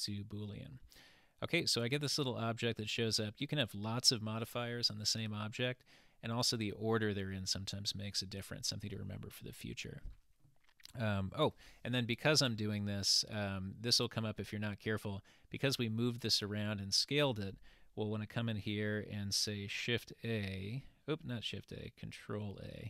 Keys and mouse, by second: 13.3 click, 20.1 shift+a, 22.7 ctrl+a.